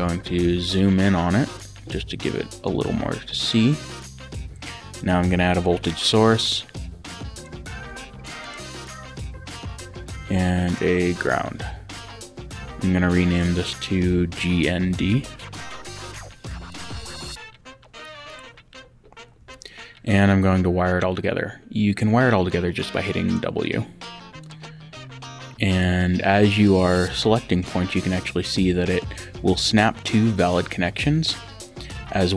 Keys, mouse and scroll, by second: 3.1 Escape, 5.0 click, 7.3 click, 9.0 Escape, 10.7 click, 13.2 click, 14.1-15.2 typing, 16.1 Return, 16.7 click, 18.3 click, 19.4 w, 23.3 click, 24.4 click, 25.7 click.